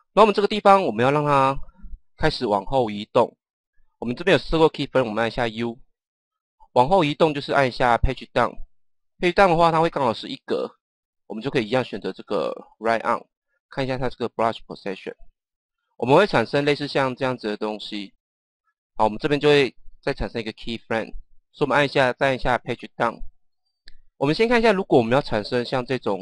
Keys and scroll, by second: 5.2 u, 8.0 Page_Down, 22.9 Page_Down.